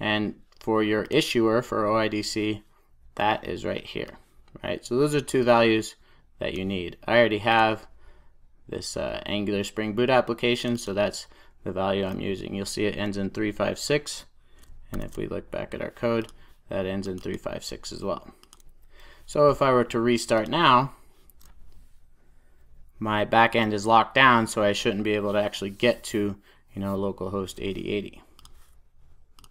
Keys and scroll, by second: 20.3 ctrl+r, 20.8 ctrl+r.